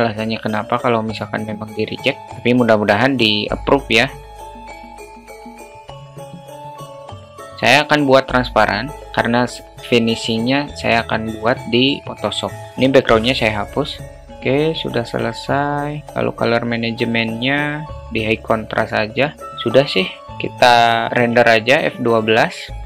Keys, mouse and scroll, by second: 1.5-2.2 drag, 3.0 click, 3.8 click, 4.5 drag, 4.7 click, 5.2 drag, 14.0 Delete, 17.2-18.0 drag.